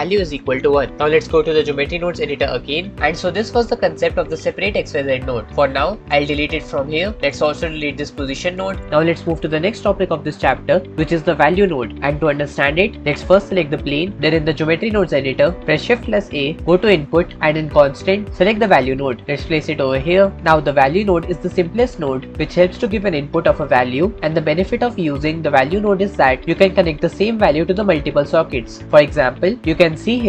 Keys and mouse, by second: 2.0-4.0 drag, 6.3 x, 8.4 x, 8.5 click.